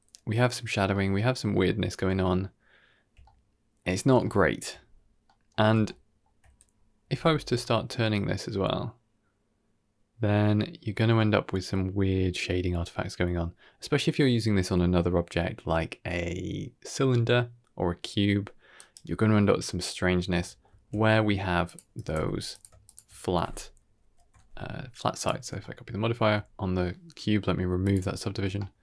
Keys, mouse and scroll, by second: 0.6 scroll down 1, 0.8-1.3 middle drag, 1.5-1.9 scroll down 2, 2.1-2.8 shift+middle drag, 3.1-3.7 middle drag, 4.0 scroll down 1, 4.1-4.5 shift+middle drag, 4.7-5.2 scroll up 3, 5.2 middle drag, 5.7-6.1 shift+middle drag, 6.6 scroll down 1, 6.9 r, 19.7 middle drag, 20.1 scroll down 2, 20.3 shift+middle drag, 20.6 shift+a, 21.9 g, 22.7 shift+click, 23.9 ctrl+l, 25.5-26.0 shift+middle drag, 26.3-26.8 scroll up 3, 26.8 ctrl+z, 26.8 click, 27.7 click, 28.3 scroll down 2, 28.5 shift+middle drag.